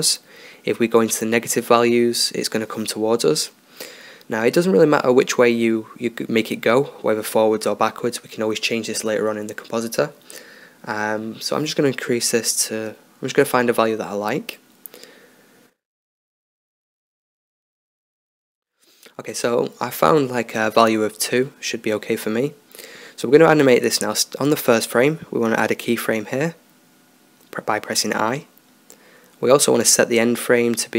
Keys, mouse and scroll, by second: 0.2-3.2 drag, 6.0-8.8 drag, 10.9-13.8 drag, 20.6 ctrl+s, 26.6 i.